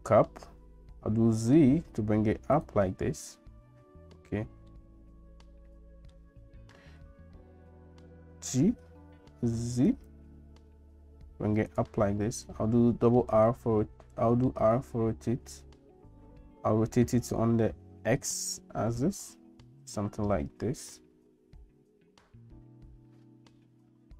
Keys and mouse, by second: 4.7-6.3 middle drag, 8.2 g, 12.9 r.